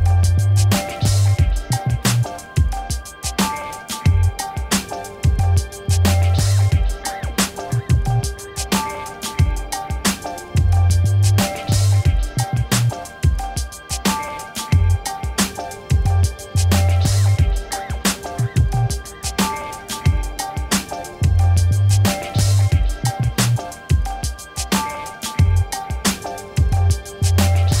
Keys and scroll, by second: 1.7 ctrl++, 2.3 space, 10.1 ctrl++, 17.6 ctrl+-, 18.9 v, 21.6 ctrl+d, 22.7 a, 24.4 p, 25.8 space.